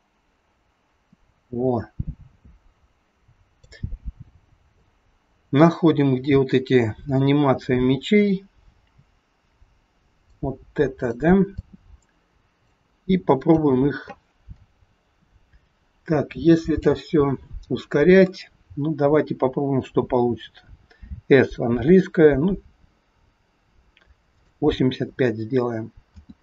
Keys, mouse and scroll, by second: 4.8 click, 10.9 click, 11.5 click, 14.6 click, 14.6 scroll down 2, 16.4-17.2 scroll down 1, 26.0 space.